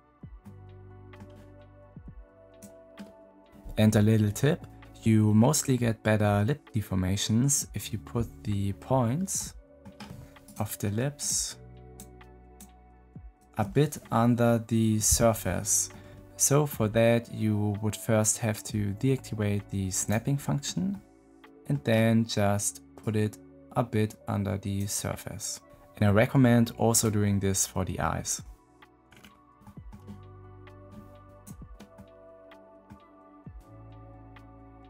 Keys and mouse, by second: 0.4 click, 1.9 middle click, 9.3 middle click, 10.3 middle click, 11.1 shift+middle click, 13.2 shift+middle click, 15.8 middle click, 19.9 middle click, 20.8 middle click, 23.2-24.7 drag, 29.5 click, 30.7 click, 31.9-32.9 middle drag.